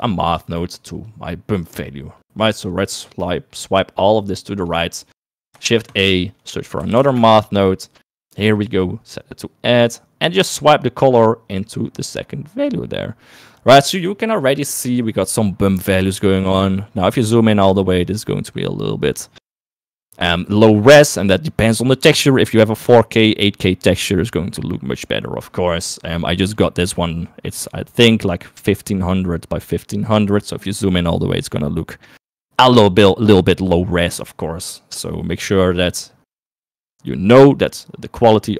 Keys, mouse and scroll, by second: 0.0 click, 0.7 middle click, 1.1-2.5 drag, 2.6-3.7 drag, 4.4 click, 5.2 middle click, 5.7 shift+a, 10.8-12.8 drag, 31.0 middle click.